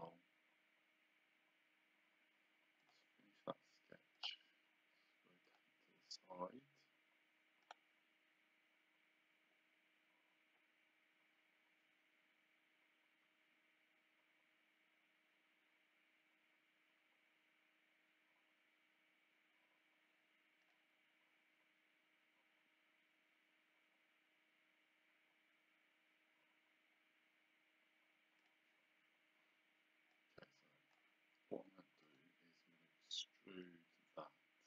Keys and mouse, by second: 2.8 click, 4.2 click, 5.5 click, 7.6 click, 20.6 click, 28.4 click, 30.1 click, 32.1 right click.